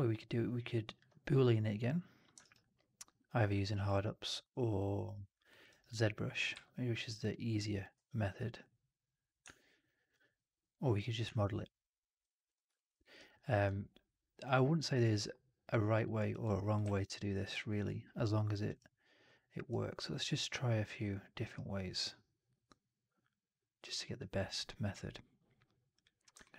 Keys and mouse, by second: 2.3 alt+right click, 2.5 alt+click, 3.5 alt+right click, 3.7 alt+click, 5.4 alt+middle click, 5.6 alt+right click, 5.8 alt+click, 6.4 q, 7.5 alt+click, 7.8 q, 12.6 alt+drag, 12.9 alt+middle drag, 13.0 alt+right drag, 13.2-14.8 alt+drag, 14.9-15.9 alt+drag, 16.1 alt+right drag, 16.3 alt+click, 16.7 alt+w, 18.1 click, 26.3-26.5 alt+middle drag.